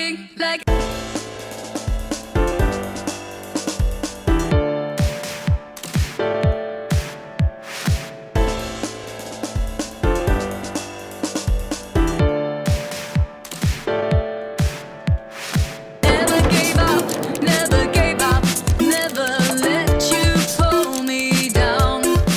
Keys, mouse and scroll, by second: 0.6 click, 1.9 click, 2.2 drag, 2.8 click, 3.1-3.6 drag, 4.2 click, 4.9 click, 6.4 click, 8.0-10.9 drag, 12.1 click, 12.8 click, 14.4 click, 15.3 click, 20.3 F2.